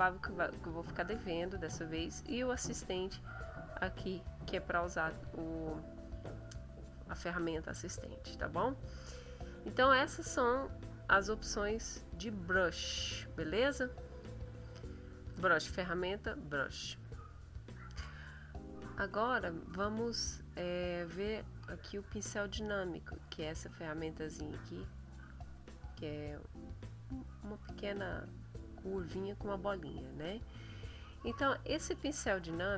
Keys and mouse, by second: 5.5 middle click, 7.7 middle click, 8.4 middle click, 10.4-13.5 drag, 13.2 middle click, 17.0 click, 23.3 click, 31.3-32.4 middle drag, 32.5 middle click.